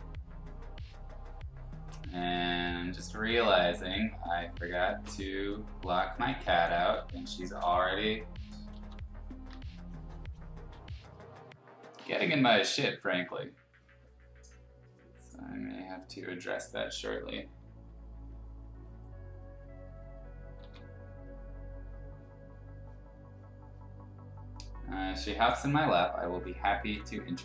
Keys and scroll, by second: 6.5 ctrl+z, 8.7 ctrl+z, 9.5 x, 10.7 x, 12.6 ctrl+z, 20.6 ctrl+z, 26.8 ctrl+z.